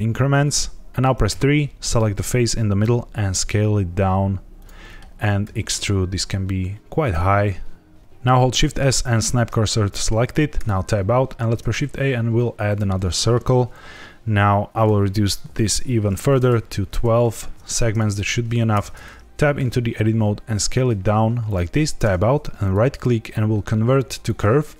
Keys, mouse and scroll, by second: 1.2 3, 1.8 click, 2.8 s, 4.5 click, 4.8 middle click, 5.1 scroll down 2, 5.4 e, 7.0 click, 7.2 middle click, 7.9 click, 7.9 g, 7.9 z, 8.5 shift+s, 10.5 Tab, 11.3 shift+a, 13.0 shift+middle click, 13.5 scroll up 2, 14.7 click, 18.7 Tab, 19.5 s, 21.4 click, 21.9 Tab, 22.6 right click.